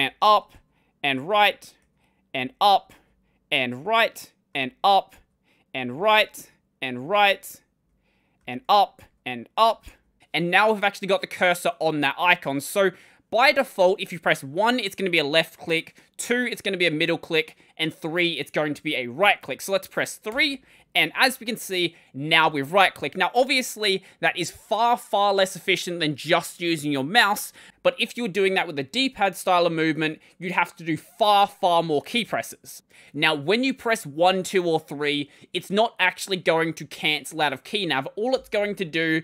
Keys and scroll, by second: 0.0-9.9 typing, 20.1 3, 38.2 ctrl+;.